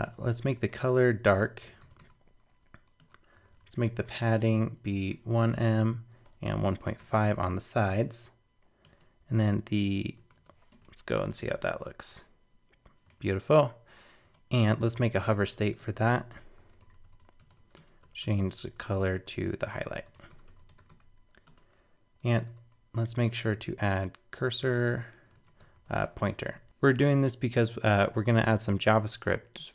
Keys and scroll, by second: 10.2 super+BackSpace, 10.5 super+s, 10.7 super+Tab, 11.5 super+r, 13.1 super+Tab.